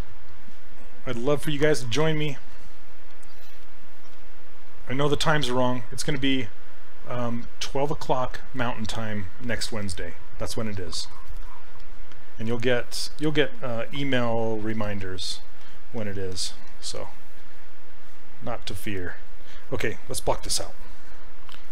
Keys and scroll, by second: 14.2 s.